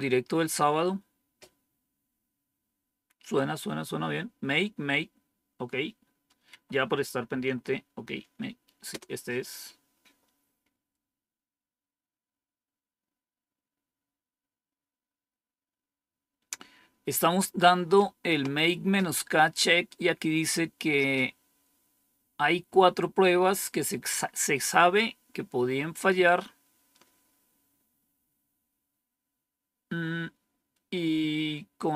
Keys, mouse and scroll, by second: 6.4 Up, 7.3 Down, 8.8 Return, 19.7-20.4 scroll down 2.